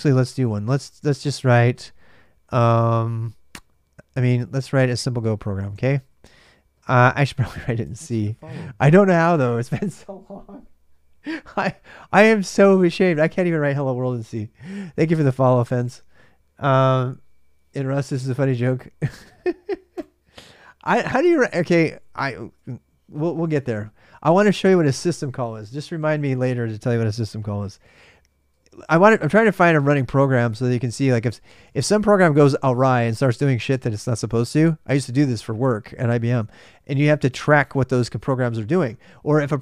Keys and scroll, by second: 0.0-8.5 typing, 21.3-22.3 typing, 28.6-33.1 typing.